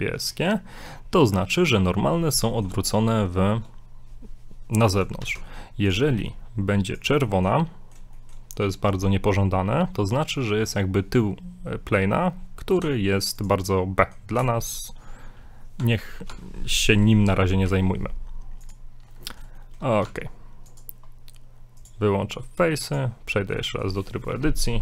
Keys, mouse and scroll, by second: 2.1 middle click, 5.2 shift+d, 6.1 r, 7.2-8.8 shift+middle drag, 8.9-9.6 scroll up 2, 9.9-10.3 scroll down 2, 10.4 middle click, 12.8 x, 14.0 middle click, 15.8 Tab, 16.3 Tab, 17.3 z, 17.7 z, 18.8 click, 19.6 shift+middle click, 20.1 Tab, 20.7 click, 22.9 click, 23.4 middle click, 23.7 shift+middle click.